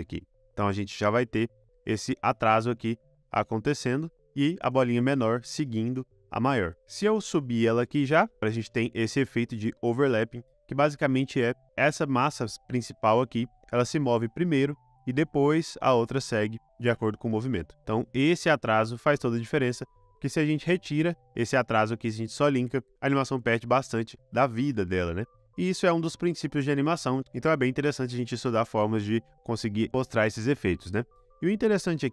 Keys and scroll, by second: 2.6 space, 4.6 space, 8.4 space, 9.1 space, 10.5 space, 22.8 space, 24.6 space, 30.2 space.